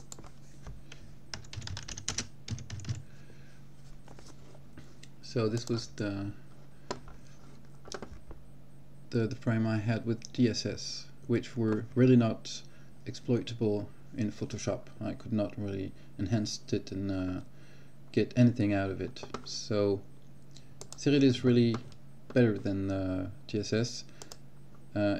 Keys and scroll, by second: 2.2 space.